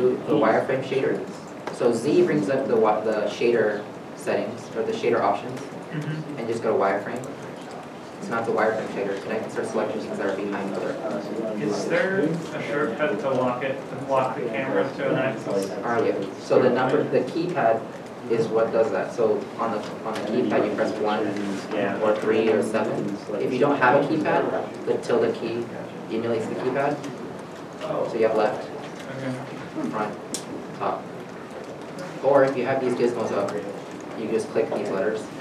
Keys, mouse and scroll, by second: 0.3 z, 1.2 click, 2.1 z, 7.0 click, 7.1 z, 10.1 z, 11.5 b, 12.8 alt+a, 14.2 b, 15.1 alt+a, 20.9 alt+a, 20.9 KP_1, 22.2 KP_3, 22.8 KP_7, 23.9 middle click, 28.4 click, 29.2 `, 30.2 `, 31.8 middle click.